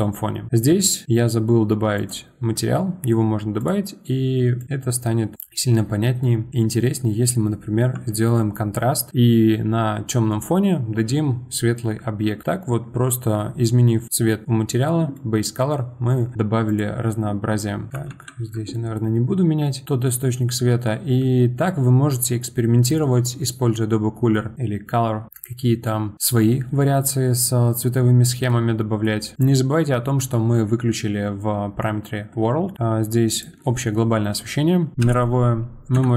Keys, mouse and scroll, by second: 0.5 click, 1.9-3.7 drag, 6.2 middle click, 6.5 scroll up 2, 6.7-9.1 middle drag, 9.1-12.2 scroll up 1, 15.1-16.7 middle drag, 16.7 click, 17.9 click, 18.1 ctrl+z, 18.7-20.4 middle drag, 20.4-22.9 scroll up 3, 28.5-29.3 middle drag, 29.3 click, 33.3-35.8 drag.